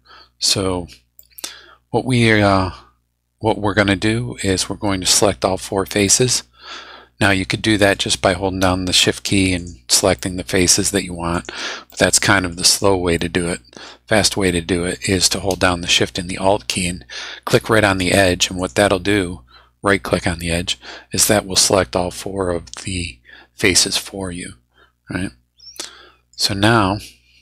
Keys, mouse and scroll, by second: 1.1 middle click, 1.7-4.5 drag, 6.0-8.1 drag, 9.6 shift+right click, 10.2 shift+middle click, 11.3 shift+right click, 11.9-13.0 shift+middle drag, 12.7 right click, 13.2-15.1 middle drag, 18.0 alt+shift+right click, 18.6 alt+shift+right click, 21.5-25.9 alt+shift+drag, 25.9 middle click, 26.5-26.8 scroll down 2, 27.1-27.4 scroll down 2.